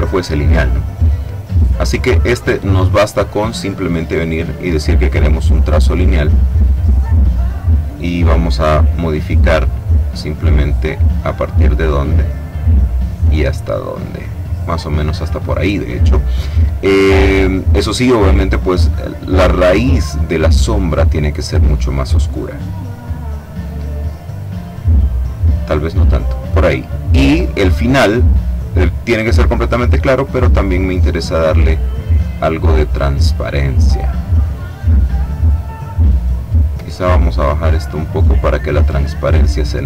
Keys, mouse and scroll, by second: 3.4 click, 4.1 click, 8.9 click, 10.7-12.1 drag, 12.6-15.4 drag, 19.2 click, 21.1-26.6 drag, 27.4 click, 29.3-31.8 drag, 32.8-35.1 drag, 37.1-39.8 drag.